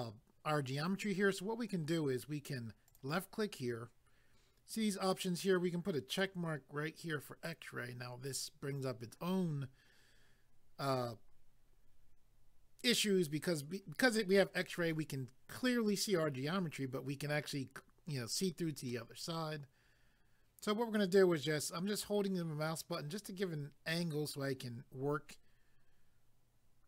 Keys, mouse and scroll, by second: 2.9 click, 6.1 click, 18.9 middle click.